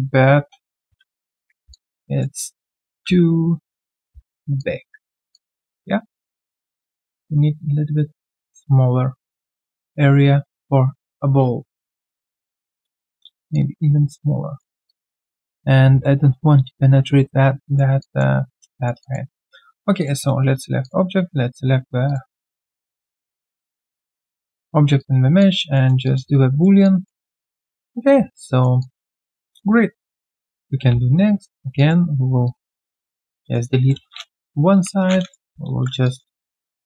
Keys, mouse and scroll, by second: 0.0 ctrl+z, 1.7 alt+click, 3.0 typing, 4.1 typing, 5.3 typing, 5.3 alt+click, 9.4 alt+middle click, 9.7 alt+click, 14.8 alt+click, 15.2 alt+right click, 17.6 alt+right click, 18.0 alt+click, 18.7 alt+right click, 19.0 alt+click, 20.8 shift+click, 22.5 alt+click, 25.4 alt+click, 25.7 alt+middle click, 26.0 alt+click, 26.3 q, 26.4 right click, 26.8 alt+click, 27.2 alt+right click, 27.4 alt+click, 28.5 alt+middle click, 28.8 alt+click, 29.1 alt+middle click, 29.4 alt+click, 29.7-30.0 alt+scroll down 1, 30.0 alt+click, 31.1 right click, 31.7 alt+click, 33.3 alt+middle click, 33.7 alt+click, 35.0 right click, 35.4 typing, 36.0 alt+click, 36.3 alt+middle click.